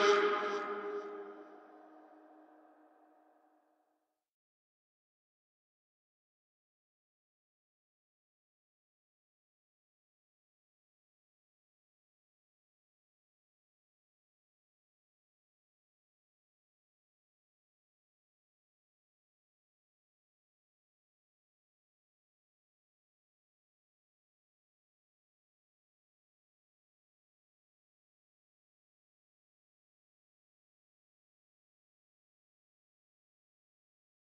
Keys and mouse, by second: 1.5 shift+click, 4.1 shift+click, 4.5 shift+click, 4.8 shift+middle click, 9.9-11.3 drag, 9.9-11.3 right drag, 11.5 shift+middle click, 13.6 s, 16.5 Tab, 16.6-18.2 drag, 17.6-18.2 right drag, 18.5-19.4 middle drag, 19.4-20.3 drag, 20.5-21.1 shift+drag, 21.5-22.4 middle drag, 22.6-24.0 shift+middle drag, 24.2-29.1 middle drag, 29.1 shift+middle drag, 29.6 ctrl+middle click, 30.0 shift+middle click, 30.4 ctrl+middle drag, 30.8 shift+middle click, 31.1 middle drag, 31.9-33.3 middle drag, 33.8 click.